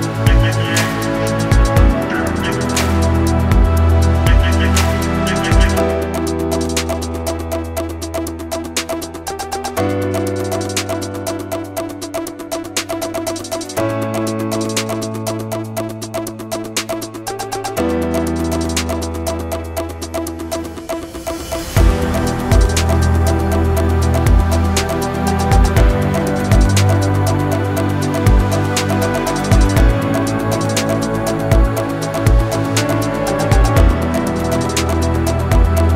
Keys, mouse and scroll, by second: 0.8-1.2 middle drag, 1.5 shift+d, 1.8 click, 2.0 middle click, 2.2 shift+a, 2.6 s, 3.8 click, 3.9 middle click, 4.4 shift+middle drag, 4.8 Tab, 4.9 shift+middle click, 5.4 click, 5.7 click, 5.9 e, 6.6 click, 6.9 ctrl+b, 8.2 Tab, 8.3 drag, 8.4 shift+middle click, 8.7 click, 8.7 right click, 9.0 drag, 9.3 s, 9.6 g, 10.0 middle click, 10.2 click, 10.5 click, 11.1 click, 11.3 click, 11.7 middle click, 12.0 middle click, 12.3 KP_1, 12.4 scroll up 4, 12.7 shift+middle drag, 13.1 shift+middle click, 14.0 middle click, 14.2 shift+middle click, 14.4 scroll down 1, 14.9-16.0 drag, 16.2 click, 17.7 click, 17.9 n, 19.7 click, 19.9 click, 20.7 click, 21.1 click, 21.6 click, 22.9 scroll down 2, 23.1 shift+middle drag, 23.5-24.3 shift+middle drag, 24.5 scroll down 2, 24.7 shift+middle click, 25.2 click, 25.8 click, 26.2 click, 26.6 click, 27.5 s, 29.3 click, 30.5 click, 30.8 click, 31.2 click, 31.5 click, 35.8 i.